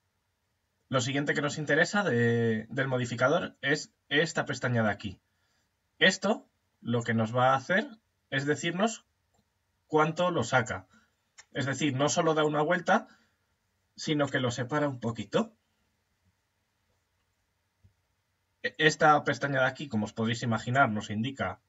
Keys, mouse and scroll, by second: 6.4 click, 11.0-13.8 middle drag, 14.0-16.8 middle drag, 20.2 click.